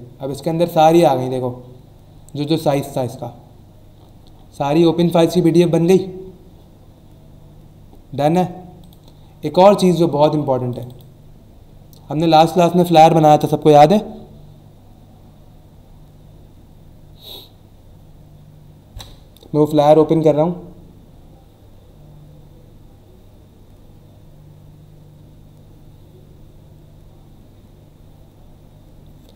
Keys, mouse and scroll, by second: 0.6 scroll down 1, 1.3 scroll down 1, 1.8-2.4 scroll down 2, 2.8 scroll down 1, 3.4 scroll down 1, 3.9-5.9 scroll up 6, 6.6-7.5 scroll down 3, 8.8 click, 10.7 click.